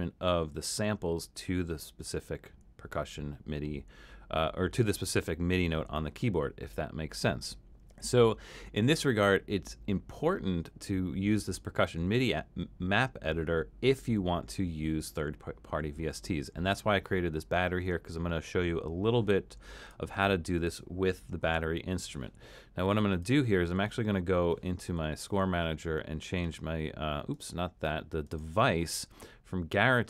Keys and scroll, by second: 21.4 super+k.